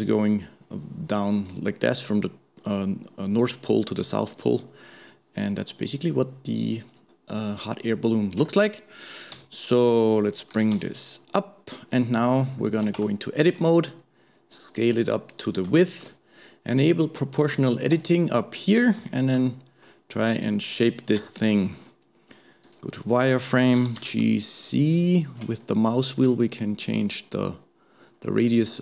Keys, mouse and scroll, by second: 8.4 Tab, 12.6 shift+middle click, 13.0 Tab, 15.8-17.9 shift+middle drag, 17.9 click, 19.1-20.3 shift+middle drag, 20.3 click, 21.2 KP_1, 22.7-23.8 drag, 23.8 g.